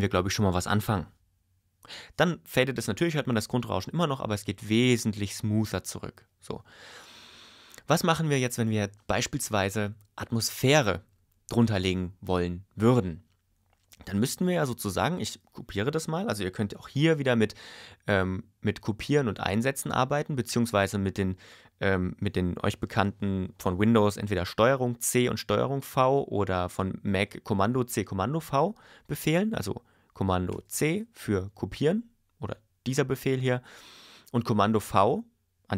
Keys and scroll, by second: 1.8 space, 30.5 super+c.